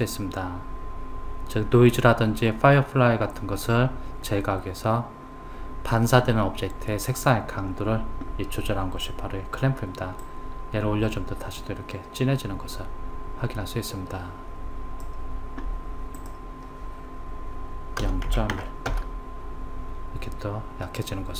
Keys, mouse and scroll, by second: 10.6 click, 16.6 click.